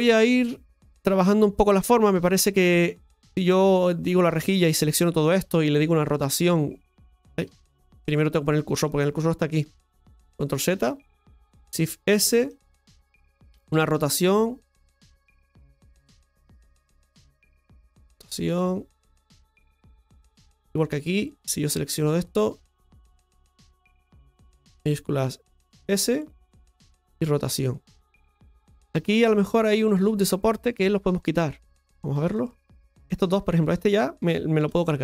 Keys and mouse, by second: 0.2 middle click, 3.7 click, 4.6 click, 10.0 ctrl+z, 15.6-17.1 drag, 18.4 r, 19.1 click, 21.2 click, 28.6 shift+middle click, 30.6 click, 32.2 click, 33.3 right click, 33.6 alt+shift+right click, 33.8 alt+shift+right click.